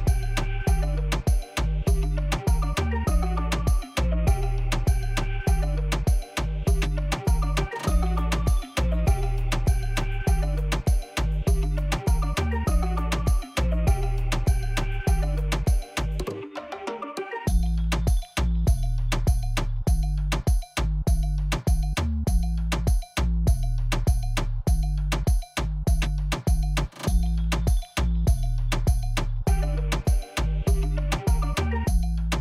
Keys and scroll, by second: 4.1 m, 6.4 t, 14.6 7, 18.6 g, 23.2 shift+d, 25.8 shift+d.